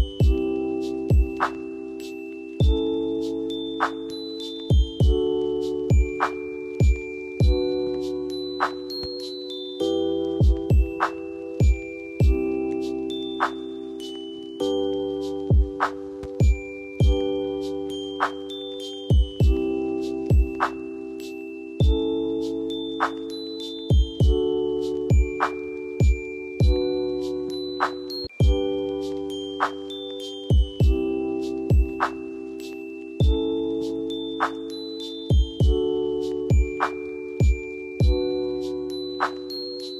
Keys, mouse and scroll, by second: 1.4-4.8 drag, 12.2 F2, 12.5-19.6 drag, 21.1 click, 24.1 space, 26.2-28.2 drag, 28.2 right click, 29.6 click, 32.6-35.5 drag, 37.8 right click, 39.2 click.